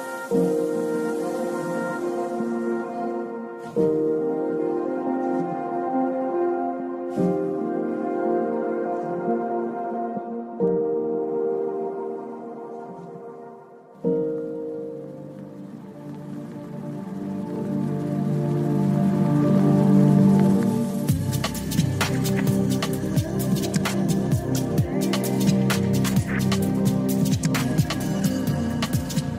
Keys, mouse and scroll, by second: 0.3 click, 1.4 click, 3.1 click, 4.0-8.1 drag, 8.5 click, 14.0 KP_1, 15.6 click, 16.6-17.6 drag, 21.5-22.3 drag, 24.5 click, 27.1 g, 28.9 click.